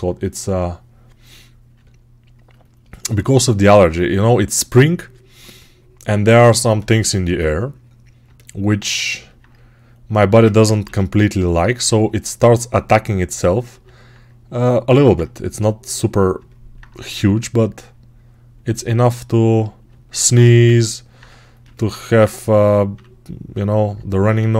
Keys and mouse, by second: 4.1 3, 6.5-13.6 alt+drag, 10.7 g, 13.6-24.5 alt+right drag, 22.8 3, 24.3 1.